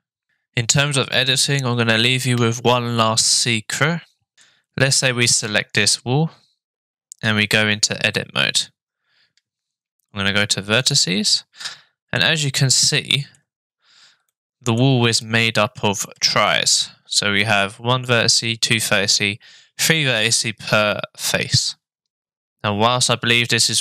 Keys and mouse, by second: 4.4 shift+Tab, 4.4 shift+click, 5.8 click, 7.3 Tab, 10.9 click, 11.6 middle click, 12.5 shift+click, 12.7 shift+middle click, 14.4 middle click, 15.3 shift+middle click.